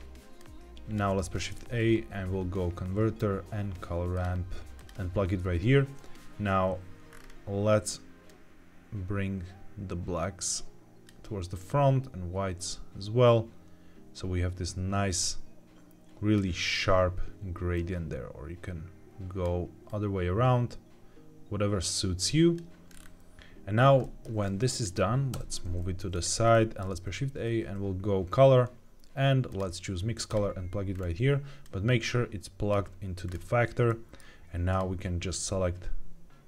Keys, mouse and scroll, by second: 0.3 click, 1.2 shift+a, 7.0-7.5 scroll up 2, 8.2-11.0 drag, 8.2 scroll up 1, 11.6-16.3 drag, 17.7-19.4 drag, 19.8-22.6 drag, 22.8-23.7 scroll down 2, 23.9 middle click, 23.9 scroll down 2, 24.4 click, 25.2 g, 26.4 middle click, 26.8 shift+a, 30.9-31.5 scroll up 2, 31.5 click, 33.2-33.8 scroll up 1, 33.8 middle click, 34.6-36.2 drag.